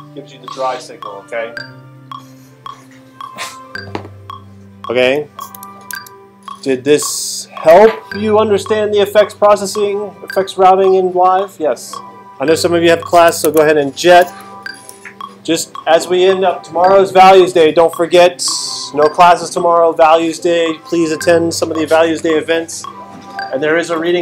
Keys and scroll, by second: 5.9 super+Tab, 13.4 super+Tab, 14.9 super+Right.